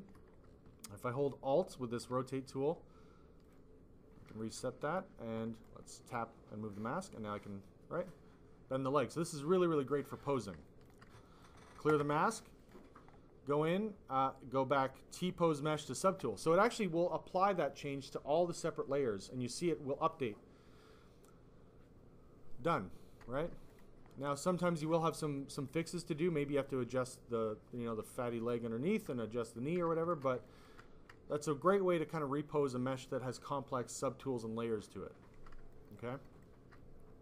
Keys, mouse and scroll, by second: 0.9 alt+click, 4.3 alt+click, 5.5 ctrl+click, 6.6 ctrl+click, 10.1 click, 10.6 alt+click, 11.3 ctrl+click, 12.5 click, 12.7 click, 15.6 click, 16.1 click, 23.6 click, 25.3 click, 29.3 alt+click, 29.4 click, 30.5 alt+click, 35.7 alt+click, 36.1 alt+click.